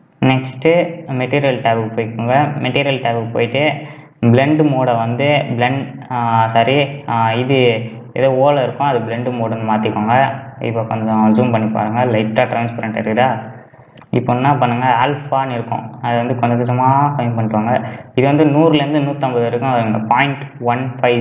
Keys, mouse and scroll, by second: 6.0-9.8 drag, 9.8-10.5 scroll up 9, 10.8-11.9 middle drag, 11.9 scroll down 3, 16.1-20.1 drag.